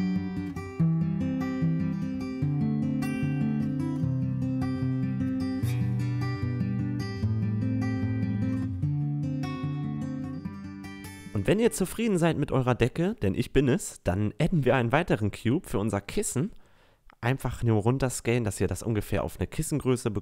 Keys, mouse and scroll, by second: 0.5 middle click, 0.6 click, 0.7 middle click, 0.8 click, 1.3-2.7 typing, 2.2 click, 2.5 click, 3.3 click, 4.1-11.1 typing, 4.5 Tab, 5.6 Tab, 7.4 click, 8.7 click, 10.5 click, 10.7 Tab, 13.4 s, 15.1 s, 16.7-18.6 drag, 17.5 s, 19.4 s.